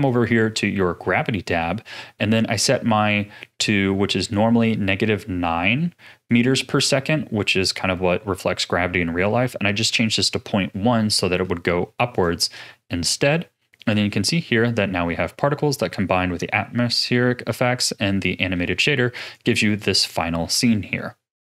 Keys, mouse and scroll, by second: 14.7-17.7 middle drag, 18.8 a, 19.2-21.4 drag.